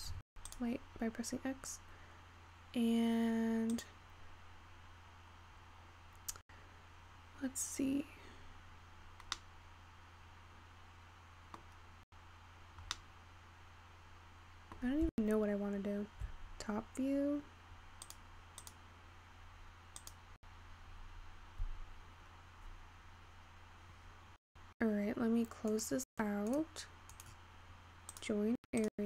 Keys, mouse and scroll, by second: 0.5 x, 1.3-4.0 scroll up 5, 11.0-12.8 middle drag, 12.8 scroll up 3, 13.3-17.2 middle drag.